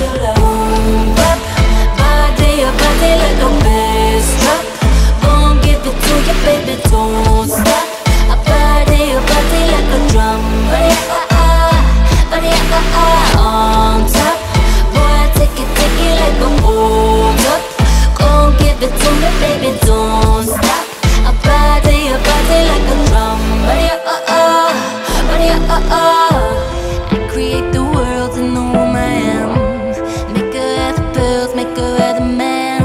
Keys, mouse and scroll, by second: 0.0 i, 0.6 e, 1.4 i, 2.8 e, 3.6 i, 4.3 e, 5.7 g, 6.5 alt+click, 6.7 Tab, 7.0 scroll down 2, 7.1 alt+drag, 7.4 alt+middle click, 7.5 alt+click, 8.0 alt+middle click, 8.1 alt+drag, 8.3 alt+middle click, 8.4 alt+right drag, 8.5 alt+click, 8.7 alt+middle click, 8.8 alt+right click, 8.9 alt+middle click, 9.0 click, 9.1 Tab, 9.5 q, 10.4 click, 10.5 scroll down 4, 11.1 alt+click, 11.2-11.6 alt+middle drag, 11.6 Tab, 12.4 scroll up 2, 12.6 scroll down 1, 12.7 alt+middle click, 13.2 alt+shift+click, 13.5 alt+shift+click, 13.7 alt+shift+click, 14.5 ctrl+b, 17.2 alt+click, 17.5 Tab, 17.8 alt+middle drag, 17.9-18.2 alt+drag, 18.2 Tab, 19.0 drag, 19.1 Tab, 19.5 alt+shift+click, 19.6 scroll down 4, 19.8 alt+click, 20.4 alt+shift+click, 21.0 alt+right click, 21.3 alt+shift+click, 21.6 ctrl+b, 22.9 Tab, 23.1 drag, 23.2 alt+right click, 23.3-23.8 alt+drag, 23.8 alt+middle click, 23.9 alt+right drag, 24.2 alt+middle click, 24.3 alt+right click, 24.4 alt+drag, 24.5 alt+middle drag, 24.7 click, 24.9 Tab, 25.7 click, 26.2 alt+shift+click, 26.6 alt+shift+click, 27.0 alt+click, 27.7 ctrl+b, 28.9 Tab, 29.1 drag, 29.2 scroll down 1, 29.3 alt+click, 30.0 alt+right click, 30.2 alt+middle click, 30.3 alt+right click, 30.3 alt+click, 30.7 alt+middle drag, 30.8 alt+right click, 31.1 ctrl+s, 32.0-32.8 drag.